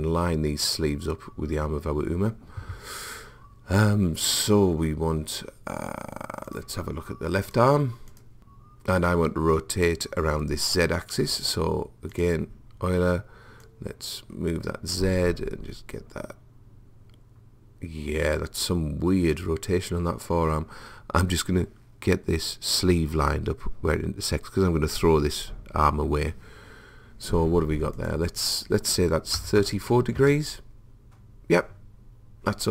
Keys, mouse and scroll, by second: 6.5 click, 11.5 click, 13.7 click, 28.0 click.